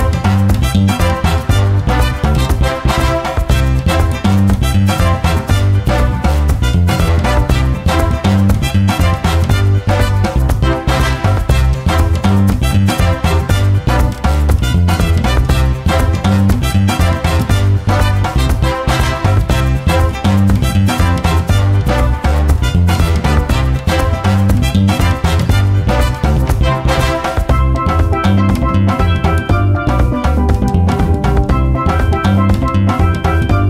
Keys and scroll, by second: 12.6 h, 16.9 F1, 24.1 F1, 30.8 1, 31.9 `, 33.2 g.